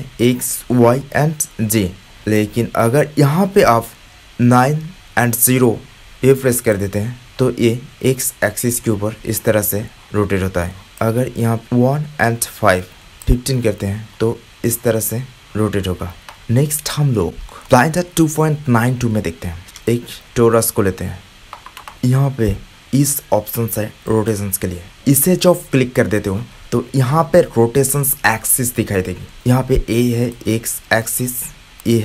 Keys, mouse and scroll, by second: 4.3-10.9 middle drag, 10.9-14.8 drag, 14.8 middle click, 16.4-17.5 drag, 24.0 click, 30.2 click, 31.0 click.